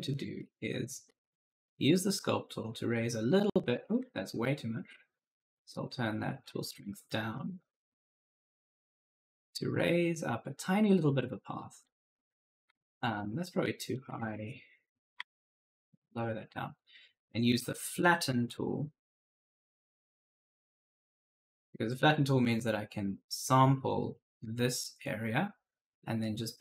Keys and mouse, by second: 0.3 right click, 0.6-2.0 typing, 2.7 click, 3.5 right click, 4.2 ctrl+z, 5.5 click, 7.2 2, 7.5 Return, 8.4 click, 11.0 click, 12.1 right click, 12.1 w, 12.5 q, 13.7 right click, 13.9 s, 14.1 d, 15.2 shift+click, 18.3 click, 19.8 click, 24.8 click.